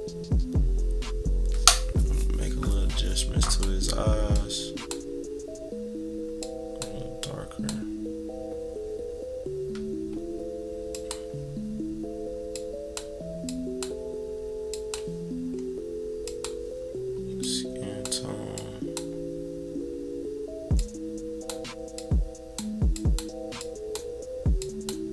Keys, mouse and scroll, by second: 3.5 click, 4.3 click, 6.4 click, 7.2 click, 10.9 click, 12.5 click, 13.4 click, 14.6 click, 15.6 scroll up 1, 16.2-17.3 drag, 17.4 click, 18.5-21.5 drag, 21.9 click, 22.9 click, 23.6 click, 24.6 click.